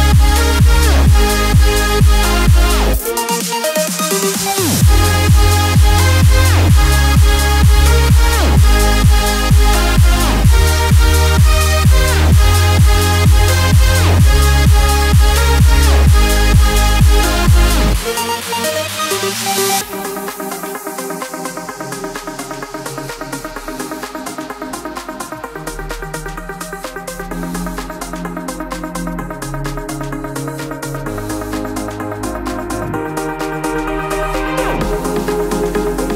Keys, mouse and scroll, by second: 3.1 typing, 6.6-14.4 shift+drag, 17.2 click, 17.2 typing, 19.6 typing, 21.7-36.1 drag, 21.7 typing, 29.2 typing.